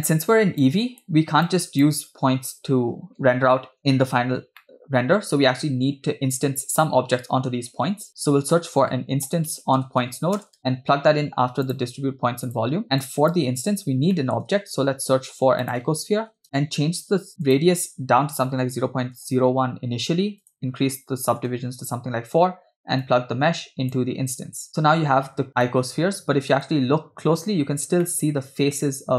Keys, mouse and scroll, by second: 0.6-1.0 drag, 1.5 click, 4.3-4.6 scroll up 2, 4.6 middle click, 7.8 shift+a, 12.9 middle click, 13.0 click, 14.1 middle click, 14.7 shift+a, 17.5-19.2 drag, 20.4-21.5 drag, 23.0-24.7 drag, 24.9 scroll up 2, 25.6-26.8 shift+middle drag, 28.1 middle click.